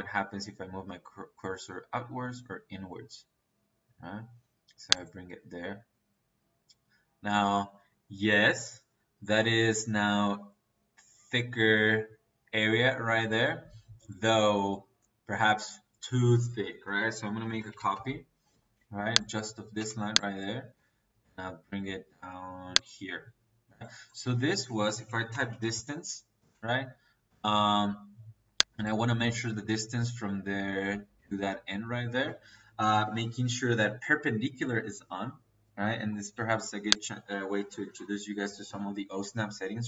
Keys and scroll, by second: 16.7 Escape, 17.1-17.9 typing, 19.7 space, 22.9 Escape, 24.5 Escape, 24.9-26.3 typing.